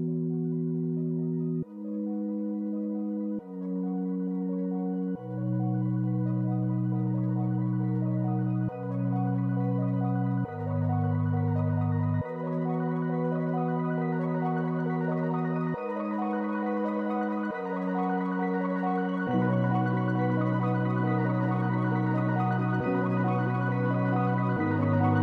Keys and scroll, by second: 7.6 space, 13.6 space, 15.7 space, 20.7 space, 23.8 space.